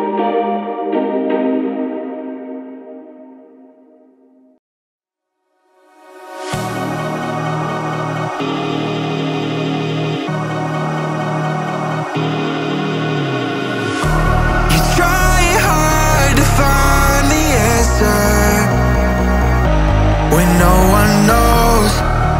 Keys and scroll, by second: 3.7 Return, 4.1 Left, 4.8 Down, 5.7 Left.